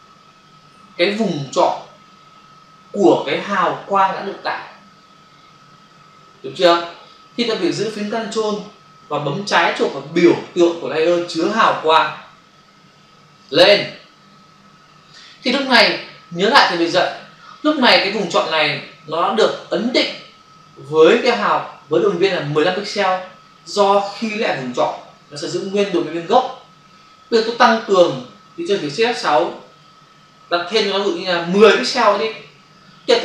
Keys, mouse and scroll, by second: 13.4 ctrl+click, 29.8 shift+F6.